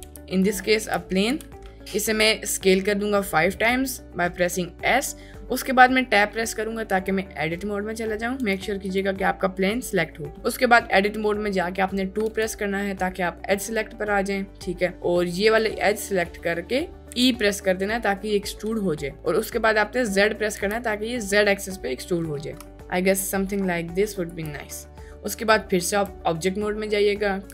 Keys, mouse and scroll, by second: 0.0 s, 0.8 s, 1.2 5, 6.9 Tab, 8.4 Tab, 8.8 click, 10.3 Tab, 12.3 2, 15.6-17.1 drag, 17.1 e, 20.6 z, 24.1 ctrl+click, 25.8 Tab.